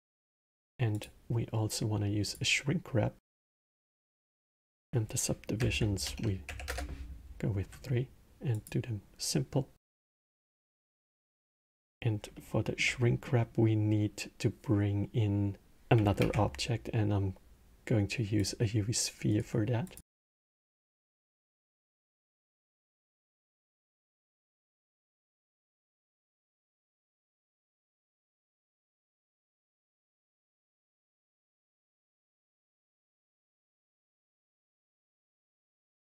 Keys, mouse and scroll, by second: 0.7-3.3 drag, 4.4-7.6 drag, 8.3 click, 9.9 click, 12.1-16.0 alt+middle drag, 16.0 shift+a, 19.0-20.2 right drag, 20.2-22.2 alt+middle drag, 22.2-25.6 drag, 30.7 BackSpace, 34.4 shift+click, 35.6 click.